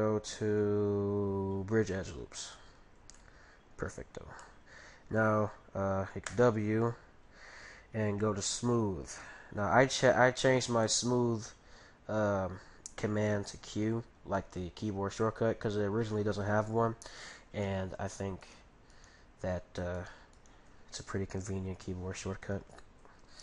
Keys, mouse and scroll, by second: 3.2-6.1 middle drag, 6.2 w, 10.0-12.6 middle drag, 14.0-14.6 scroll down 1, 14.6-16.2 middle drag, 17.6-19.2 middle drag, 18.4-22.1 right drag.